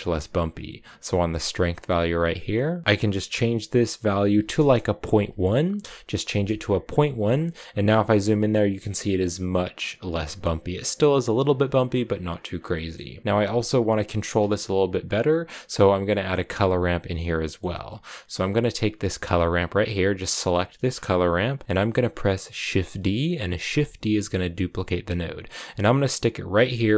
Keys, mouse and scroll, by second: 1.4-2.8 drag, 6.6 click, 7.1 shift+middle click, 7.4 scroll up 4, 11.9 click, 12.3 scroll down 4, 12.5 middle click, 13.0 click, 15.9-17.5 middle drag, 17.5-19.0 scroll up 1, 19.0 right click, 19.9-22.8 drag, 23.5 shift+d.